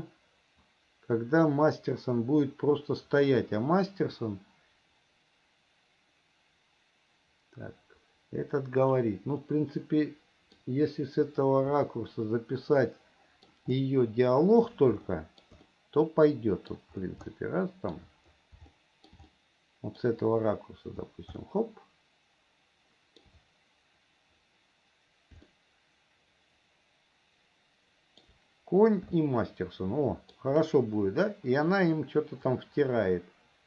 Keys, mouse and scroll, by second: 9.7-10.8 middle drag, 12.2-13.8 middle drag, 15.3 shift+middle click, 16.0-17.1 middle drag, 17.6 shift+middle click, 19.0-20.4 shift+middle drag, 21.7-23.6 shift+middle drag, 25.8-28.6 shift+middle drag, 29.4-30.7 shift+middle drag, 32.8-33.6 drag.